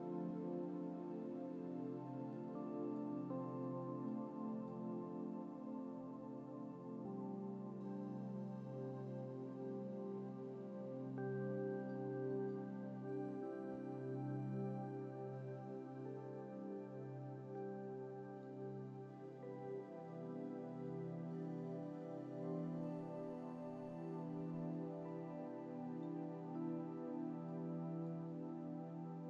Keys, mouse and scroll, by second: 1.6-2.0 scroll down 1, 2.5-3.1 middle drag, 4.2-4.9 middle drag, 9.3 scroll up 1, 10.5 scroll up 1, 12.1-12.6 middle drag, 17.7-18.5 middle drag, 20.2-21.0 middle drag, 25.3-26.3 middle drag, 27.2 scroll down 1, 27.7 middle click.